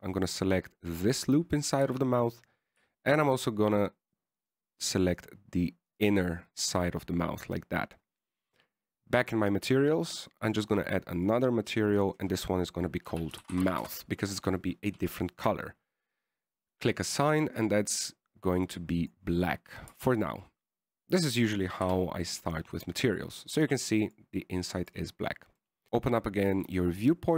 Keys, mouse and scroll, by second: 1.1 middle click, 3.2 z, 3.9-5.1 scroll up 2, 5.1 shift+right click, 5.7 shift+right click, 6.5 shift+right click, 7.2 shift+right click, 7.5 middle click, 10.5 click, 11.7 click, 12.6 click, 13.1 click, 13.3 click, 18.0 click, 18.9 click, 21.2 Tab, 22.4 click, 23.1 KP_1, 25.4 click, 25.9 click, 25.9 middle click, 25.9 scroll down 2.